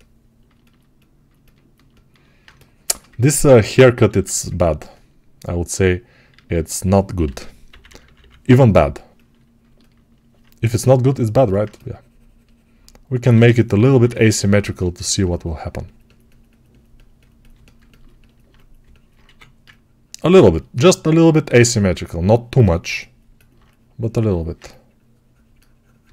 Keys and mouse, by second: 0.4-4.0 ctrl+alt+drag, 4.0 alt+q, 6.4 alt+q, 7.1 g, 7.5 ], 7.7 ], 11.0-12.6 alt+middle drag, 12.6-26.1 right drag, 13.2 g, 13.6 ], 13.7 ], 19.1 1.